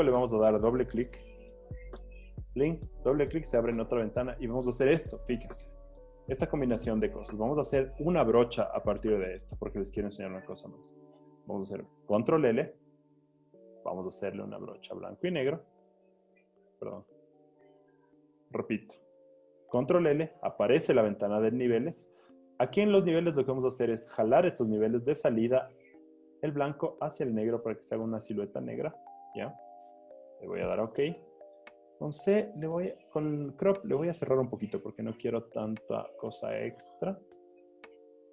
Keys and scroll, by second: 12.3 super+l, 16.2 super+z, 19.8 super+l, 31.8 c.